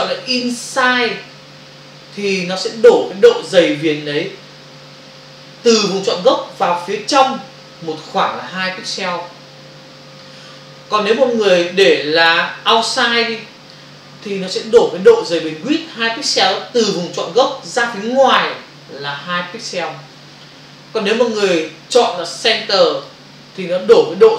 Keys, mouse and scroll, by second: 0.2 click, 13.3 click, 22.2 click.